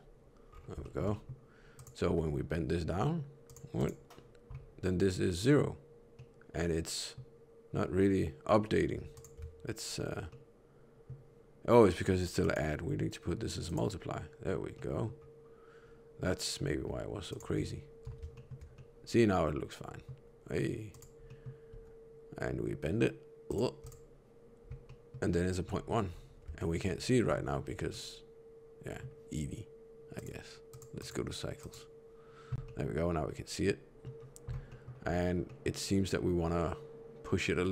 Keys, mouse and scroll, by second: 0.4-0.8 scroll down 3, 0.8 shift+middle click, 1.1 middle click, 1.7 click, 2.0 r, 3.7 click, 6.1 middle click, 7.9 scroll down 1, 9.1 scroll down 1, 9.1 ctrl+shift+click, 10.2 middle click, 12.4 click, 14.7 middle click, 17.3 ctrl+shift+click, 18.3 shift+middle click, 18.7 middle click, 20.9 click, 21.7 r, 23.8 click, 24.8 middle click, 25.6 middle click, 26.0-26.4 scroll up 4, 26.5 shift+middle click, 27.8 middle click, 30.1 click, 30.8 click, 32.6 middle click, 34.6 middle click, 35.0 scroll up 4, 35.4 middle click.